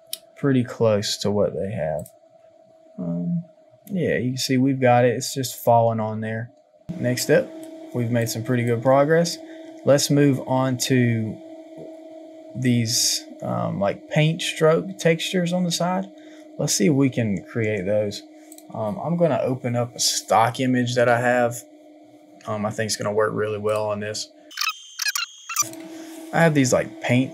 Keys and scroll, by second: 7.2 space.